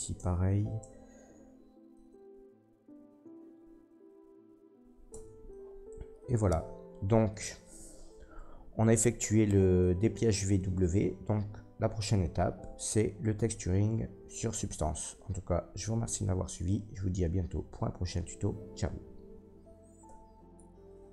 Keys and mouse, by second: 0.1 Tab, 0.8 Tab, 5.1 Tab, 20.1 ctrl+s.